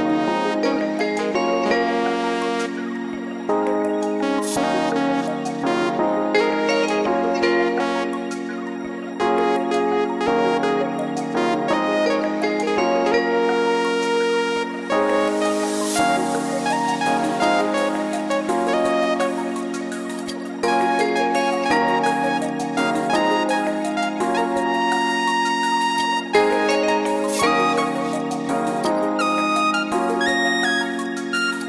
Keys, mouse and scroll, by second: 1.4 click, 1.9 right click, 2.6 middle click, 3.9 click, 5.6-6.2 scroll down 3, 6.5 click, 7.1 middle click, 8.7 click, 9.1-9.6 scroll down 2, 9.6-10.1 scroll up 2, 10.3 click, 10.7 scroll down 1, 10.9 scroll up 1, 11.3 scroll down 1, 12.0 shift+a, 13.6 click, 14.6 KP_1, 15.1 click, 15.9-16.3 scroll up 4, 16.7 shift+middle click, 17.1 scroll up 1, 17.5 click, 18.5-19.4 scroll down 7, 19.6 s, 20.7 middle click, 21.2-21.5 scroll down 3, 21.4 middle click, 21.9-22.3 scroll up 5, 22.3 middle click, 23.7 click.